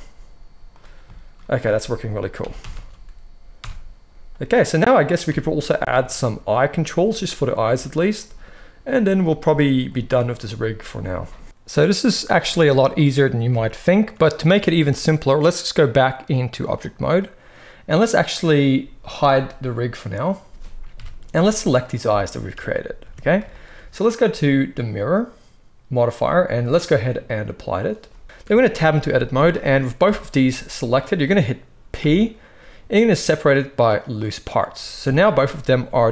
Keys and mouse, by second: 1.6 a, 2.3 alt+g, 2.5 alt+r, 2.6 alt+s, 3.5 KP_1, 5.2 KP_3, 15.9-20.0 drag, 20.0-21.7 middle drag, 20.8 KP_1, 21.7 click, 21.8-25.1 shift+middle drag, 22.4 Tab, 22.9 Tab, 25.1 click, 25.1-26.9 middle drag, 26.9-34.6 drag, 28.3 Tab, 29.0 z, 30.0 a, 31.9 p, 34.6 middle click, 35.3 Tab, 35.3 click, 35.4-36.1 middle drag, 36.0 g.